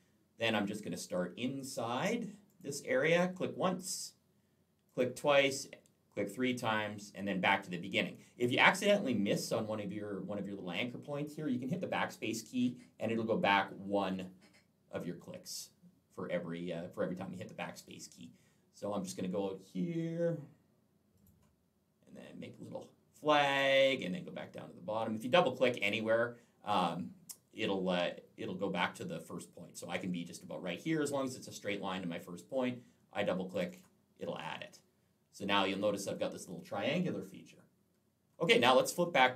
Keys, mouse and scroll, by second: 2.3 click, 4.7 click, 6.4 click, 11.9 BackSpace, 13.1 BackSpace, 20.9 click, 23.3 click, 33.3 click, 33.5 click, 33.6 double click, 39.1 click.